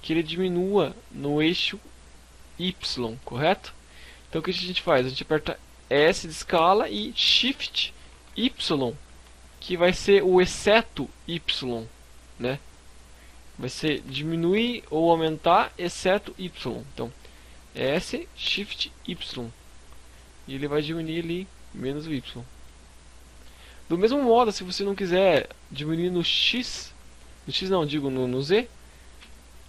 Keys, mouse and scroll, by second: 3.1 right click, 4.9 s, 12.2 right click, 13.0 KP_1, 13.6 KP_3, 15.0 z, 16.9 s, 20.5 click, 21.7 shift+scroll up 1, 21.8 shift+middle click, 28.1 s.